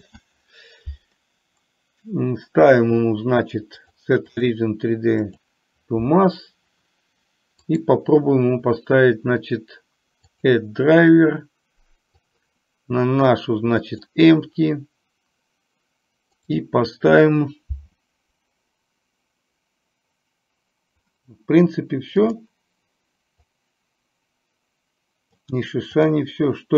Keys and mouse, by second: 4.0-5.6 drag, 7.7-14.3 right drag, 16.5-19.0 right drag, 22.3 click, 23.7-25.5 drag, 26.0 click.